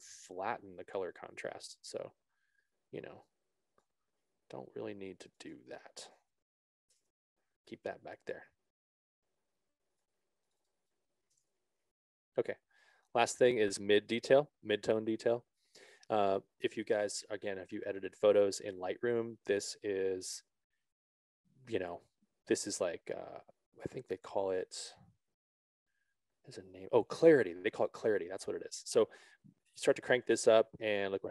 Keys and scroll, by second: 7.4 Return.